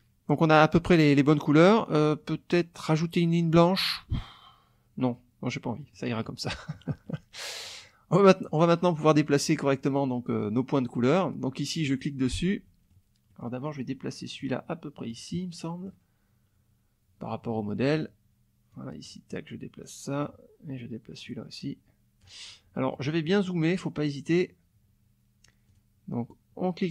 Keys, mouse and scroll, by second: 5.1 click, 5.8 click, 6.2 click, 7.0 click, 7.2 middle click, 8.1 middle click, 8.9 middle click, 11.8 click, 12.5 middle click, 13.3 middle click, 14.4 click, 15.3 middle click, 17.3 middle click, 18.7-20.4 drag, 21.2-22.4 drag, 22.7 middle click, 23.7 middle click, 25.7 click, 26.3 click.